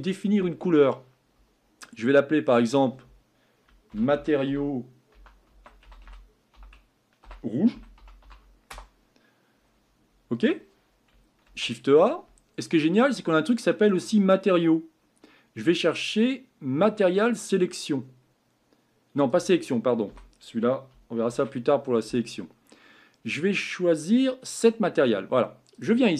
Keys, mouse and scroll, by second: 2.4 click, 2.6-8.7 drag.